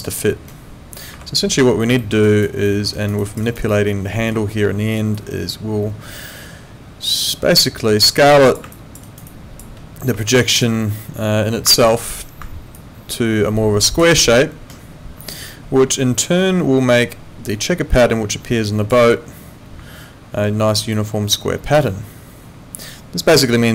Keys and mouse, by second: 1.1 Escape, 2.0 alt+middle click, 2.3 alt+right click, 2.7 alt+middle click, 2.9 alt+right click, 3.2 alt+click, 3.5 alt+right click, 3.7 alt+middle click, 5.1 click, 9.1 alt+right click, 9.3 alt+click, 10.2 alt+click, 11.8 ctrl+2.